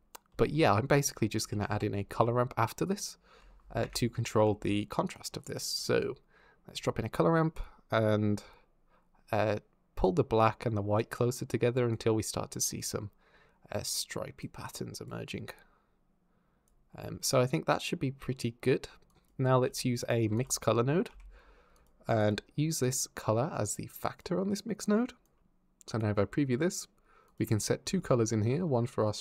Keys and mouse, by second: 0.1 shift+a, 5.6 click, 6.6-7.2 drag, 9.0 click, 10.2-10.8 drag, 11.0 click, 11.7 click, 12.7 click, 13.6 click, 14.5 click, 15.1 click, 15.8 click, 16.5-18.1 middle drag, 18.9 click, 19.4 g, 19.8 click, 20.1 shift+a, 22.6 click, 24.6 click, 27.1 click.